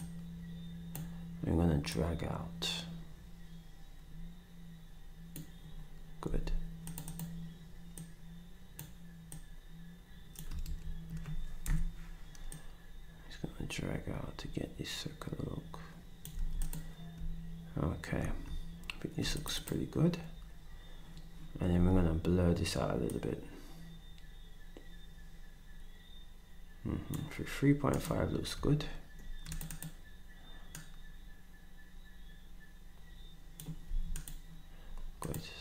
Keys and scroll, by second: 6.2 s, 10.6 ctrl+z, 11.6 Delete, 16.3 s, 21.7 s, 33.9 s.